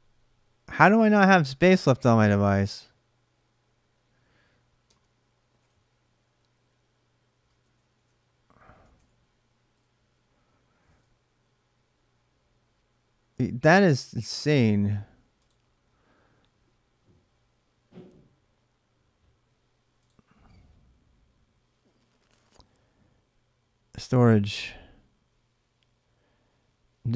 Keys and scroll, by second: 5.0-6.0 typing, 7.4-10.1 typing.